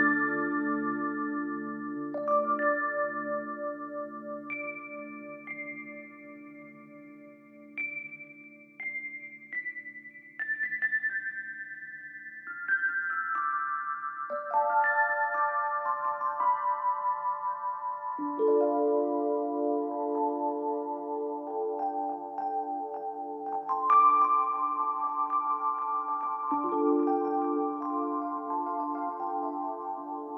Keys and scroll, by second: 0.1 Escape, 2.5 Escape, 11.5 Escape, 29.2 ctrl+z.